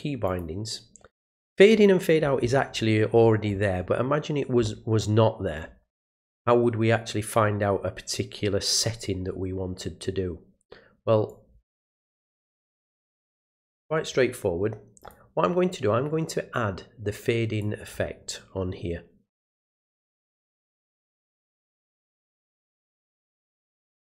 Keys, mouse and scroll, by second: 0.3 click, 1.7 middle click, 1.7 scroll down 2, 2.7 middle click, 3.2-4.2 middle drag, 3.2-4.2 scroll down 2, 11.3 click, 12.4 click, 13.5 click, 15.0 click, 17.6 click, 20.6 click, 21.4 click.